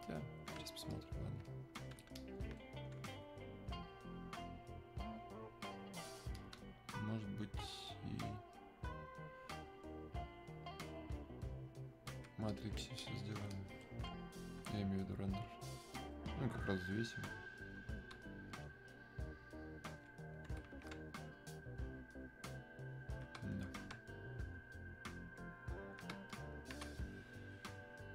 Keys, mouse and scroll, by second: 2.7 click, 3.7-6.4 alt+drag, 6.4 click, 7.4-10.0 alt+drag, 10.0-12.5 alt+drag, 12.5 click, 13.0-15.9 alt+drag, 15.9-17.9 alt+drag, 17.9 click, 18.5-21.4 alt+drag, 21.4-23.5 alt+drag, 23.5-28.1 alt+drag.